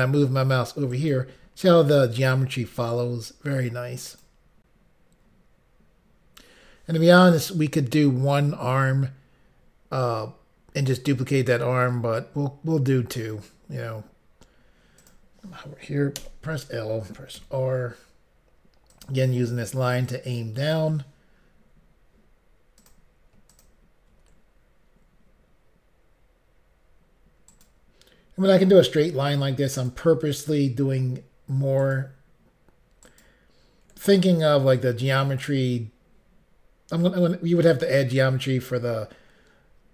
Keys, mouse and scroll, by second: 0.9 ctrl+right click, 4.0 ctrl+right click, 15.0 click, 16.2 l, 17.4 r, 18.9 click, 20.1 click, 22.8 click, 22.9 click, 23.5 ctrl+click, 23.6 ctrl+click, 27.5 ctrl+right click, 29.8 ctrl+right click, 31.8 ctrl+right click, 33.1 ctrl+right click.